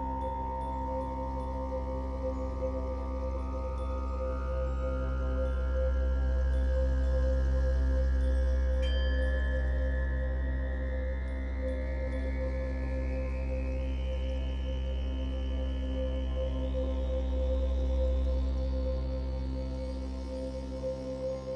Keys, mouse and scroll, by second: 9.8 scroll down 1, 10.2-18.4 shift+middle drag, 10.4 scroll down 1, 10.9 scroll up 2, 11.2-11.7 scroll down 2, 16.5-18.4 scroll up 4, 18.4-21.5 drag.